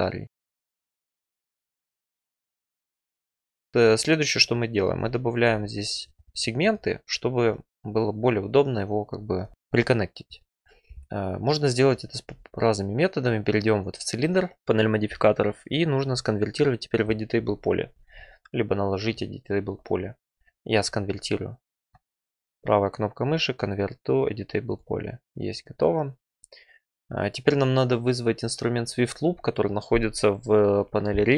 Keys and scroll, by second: 12.2 2.